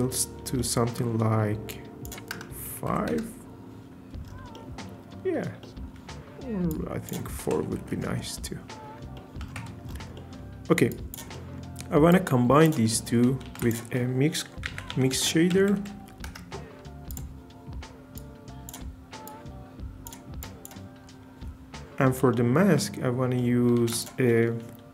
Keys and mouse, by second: 1.7-3.1 drag, 6.7-7.9 drag, 9.6 Tab, 10.9 drag, 12.1 click, 12.9 click, 13.4 shift+a, 15.7 Down, 17.2 typing, 18.1 drag, 19.3 drag, 20.4 click, 22.3 shift+middle click, 23.8 shift+a.